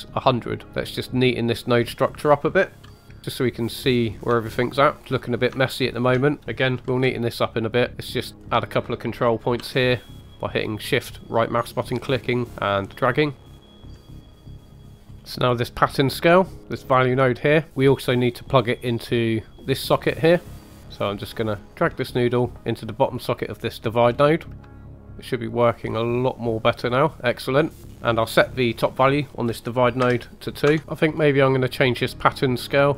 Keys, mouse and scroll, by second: 0.6 click, 1.0 shift+middle click, 1.8 shift+right click, 2.8 g, 4.0 click, 4.3 shift+middle click, 5.5 shift+right click, 6.8 g, 7.9 click, 8.2 shift+right click, 9.5 g, 13.3 shift+middle click, 13.4 click, 13.9 g, 15.0 scroll down 2, 15.1 middle click, 15.2 scroll up 3, 15.4 click, 16.6 right click, 16.6 middle click, 17.2 click, 17.7 scroll up 2, 18.4-20.0 drag, 20.5 click, 24.0-24.5 scroll down 2, 24.4 middle click, 24.6-26.9 shift+drag, 27.6 scroll down 2, 27.8 middle click, 27.9 scroll up 3, 28.0 click, 28.7 click, 30.8 middle click, 30.8-31.5 scroll up 4, 32.8-32.9 drag.